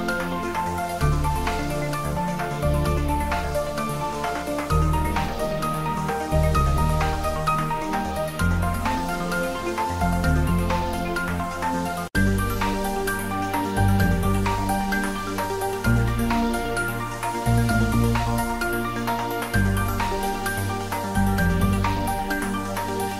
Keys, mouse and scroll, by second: 1.0 ctrl+middle click, 1.8 shift+middle click, 2.5 middle click, 2.9 shift+click, 3.9-5.2 middle drag, 5.2 shift+click, 6.4 middle click, 7.0 click, 10.3 s, 12.7 click, 13.7 g, 15.0 click, 16.1-17.0 typing, 18.2 ctrl+middle click, 18.9 `, 19.2 3, 19.7 ctrl+middle click, 20.2 s, 21.2 click, 21.8 g.